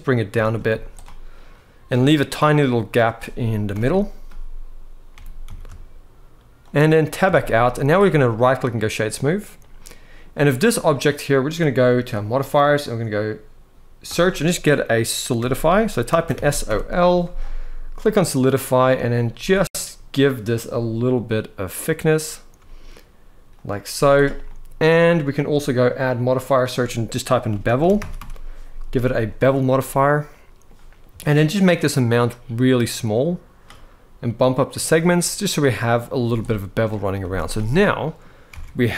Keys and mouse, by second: 0.4 z, 1.2 middle click, 3.5 ctrl+l, 4.9 g, 5.2 z, 7.0 Tab, 7.4-7.7 middle drag, 8.1-8.9 right drag, 9.5-9.9 middle drag, 12.0-17.9 drag, 18.2 middle drag, 19.1 z, 19.6-19.9 middle drag, 20.8-22.2 shift+drag, 23.6 z, 24.1 middle click, 25.6-28.9 drag, 29.6-30.3 middle drag, 31.1-33.3 shift+drag, 34.2 click, 35.6 middle drag, 35.9 z, 36.5-36.8 middle drag, 36.9 z, 37.5-37.9 middle drag, 38.2 alt+a, 38.5-38.9 middle drag.